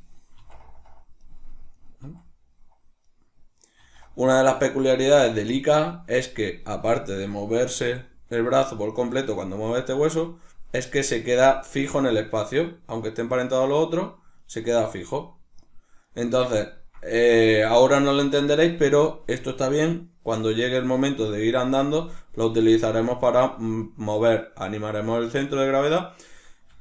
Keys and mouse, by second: 0.4 r, 1.8 right click, 2.1 r, 3.6 right click, 3.8 r, 4.9 right click, 5.2 r, 5.9 right click, 6.8 right click, 7.7 g, 9.2 right click, 10.8 right click, 12.2-13.8 middle drag, 12.2 r, 13.8 right click, 14.4 right click, 14.7 r, 16.2 right click, 16.7-22.2 ctrl+middle drag, 22.2 right click, 22.5 g, 24.3 right click, 26.5 right click, 26.7 g.